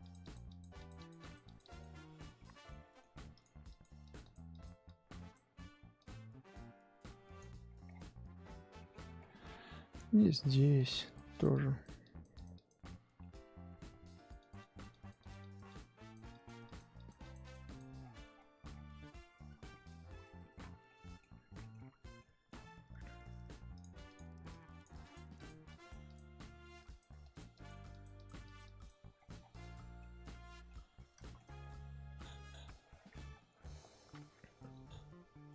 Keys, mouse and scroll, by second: 2.3 shift+middle click, 3.3-7.6 drag, 7.6-8.7 scroll down 11, 8.8 middle click, 8.9-10.4 scroll up 8, 9.2 shift+middle click, 10.4-13.2 drag, 13.2 shift+middle click, 14.1-18.0 drag, 18.0 scroll down 2, 18.1 scroll up 1, 18.3-19.1 scroll down 10, 19.1-20.5 scroll up 13, 19.7 shift+middle click, 20.5 scroll down 6, 20.9 middle click, 21.3-23.7 scroll up 9, 21.6 middle click, 22.0 shift+middle click, 22.5 middle click, 23.7-29.1 drag, 29.1-29.6 scroll down 10, 30.0 middle click, 30.9-34.4 scroll up 5, 31.2 shift+middle click, 34.4 scroll up 1, 34.5-35.5 middle drag.